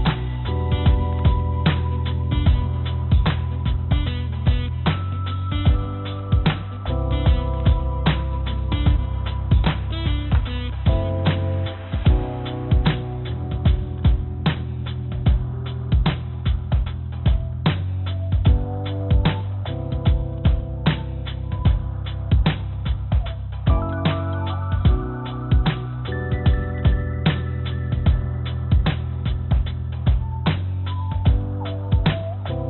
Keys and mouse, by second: 3.6 g, 6.4 middle click, 7.2 click, 9.4-10.7 drag, 12.1-13.8 drag, 15.6-16.7 drag, 16.9-18.6 drag, 20.2 click, 20.7 click, 23.4 click, 24.6 click, 26.0 click, 27.2 click, 27.5 click, 29.6-30.7 drag, 31.1 click, 32.4 shift+d.